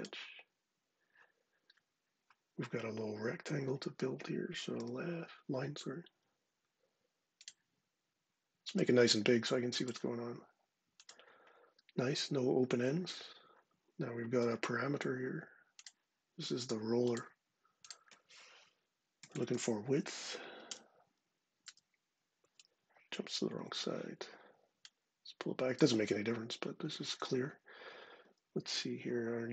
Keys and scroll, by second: 4.6 l, 12.6 ⟲, 14.2 d, 18.2-19.8 typing, 20.4 Return, 21.4 Return, 23.4 Escape.